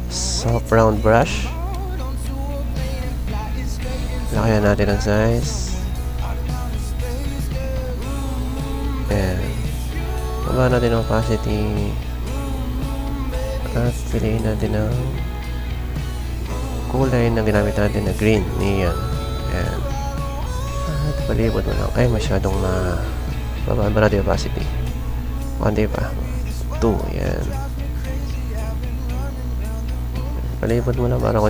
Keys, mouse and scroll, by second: 1.5 typing, 5.5-7.8 drag, 7.8 right click, 16.1 click, 16.3 click, 18.0 click, 19.2 right click, 21.0 click, 21.8 ctrl+z, 24.5 click, 25.5 ctrl+z, 26.5 2, 27.6 ctrl+z, 28.8 click, 29.6 click, 30.3 click.